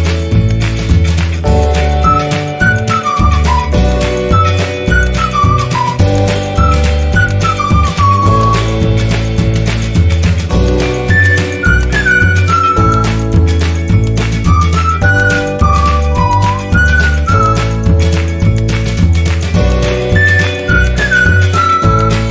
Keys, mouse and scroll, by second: 7.4-8.0 scroll down 1, 8.5 click, 11.3 click, 13.3 click, 14.7-22.3 drag.